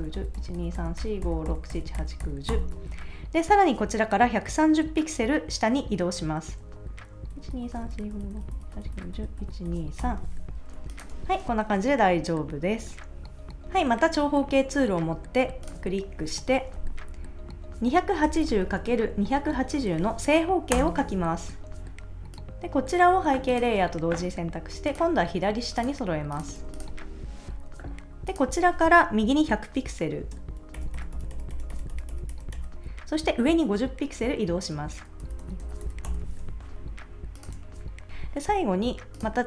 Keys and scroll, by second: 7.3 shift+Down, 11.1 super+s, 18.0-19.9 typing, 20.7 Return, 26.6 super+s, 30.7 shift+Right, 35.2 shift+Up, 37.5 super+s.